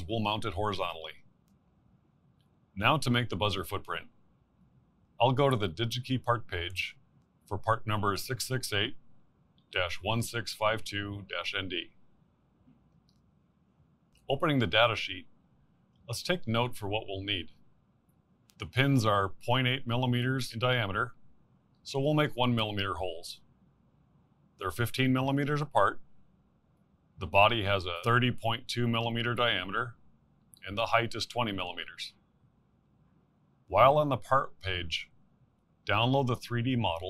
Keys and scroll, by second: 8.6 typing, 10.8-12.2 typing.